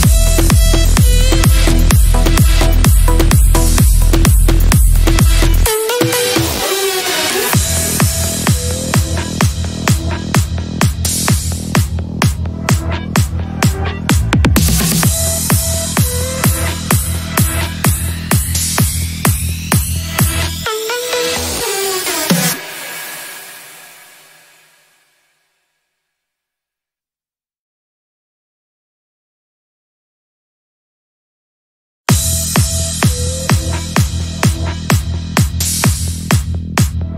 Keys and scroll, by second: 2.5 F3, 15.2 shift+F2, 15.9 Up, 17.6 F3, 26.2 c, 26.5 e, 27.0 shift+F2, 28.2 F3, 33.2 shift+F2, 33.9 F3.